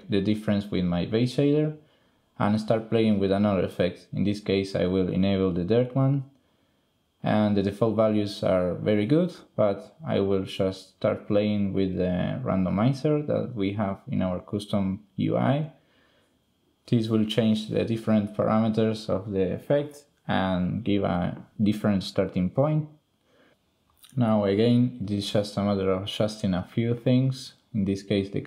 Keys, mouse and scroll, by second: 2.6 click, 3.1 shift+click, 3.5 drag, 4.5 click, 6.7 click, 7.5 drag, 8.1 drag, 8.5 click, 9.0 ctrl+click, 10.9 click, 11.5 drag, 16.4 click, 19.3 click, 19.9 click, 20.4 click, 21.6 click, 24.8-26.1 drag, 26.5-27.7 drag, 28.2 drag.